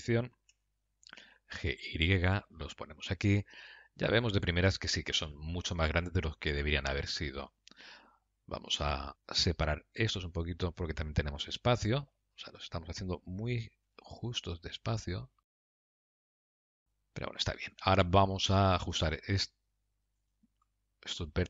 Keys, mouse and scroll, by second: 9.5 click, 10.4 shift+click, 12.1 g, 16.8 middle click, 18.7 click, 19.5 Tab, 20.6 shift+click.